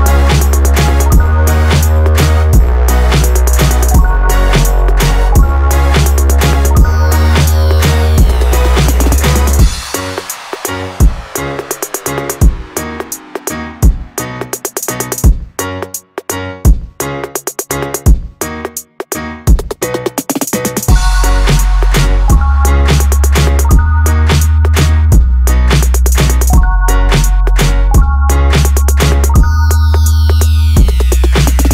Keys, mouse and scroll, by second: 0.5 r, 7.1 ctrl+z, 8.7 click, 10.4-11.6 drag, 12.5 r, 22.7 click, 23.6 click, 24.7 Tab, 25.7-26.9 scroll down 3, 26.9 click, 31.3-31.7 scroll up 2.